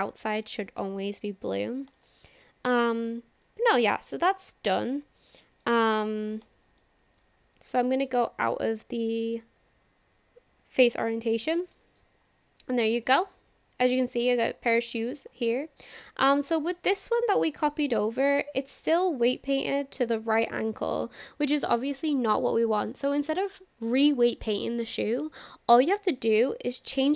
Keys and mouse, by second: 0.5 middle click, 2.1-2.5 shift+middle drag, 3.4-4.2 middle drag, 4.8 middle click, 6.6 shift+middle drag, 8.7-11.7 drag, 11.9 click, 12.7-14.9 middle drag, 15.7-16.0 shift+middle drag, 16.5-16.8 middle drag, 17.0-17.4 shift+middle drag, 17.5 click.